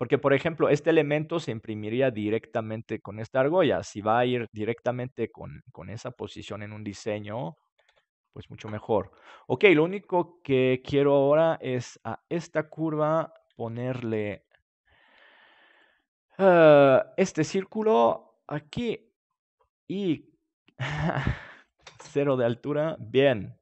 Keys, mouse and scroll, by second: 0.0-3.6 middle drag, 5.4-6.9 middle drag, 7.8 ctrl+s, 12.3-14.2 right drag, 13.7-18.7 middle drag, 15.7-19.5 drag, 19.5-21.1 middle drag, 21.5-23.3 drag, 22.5 middle click.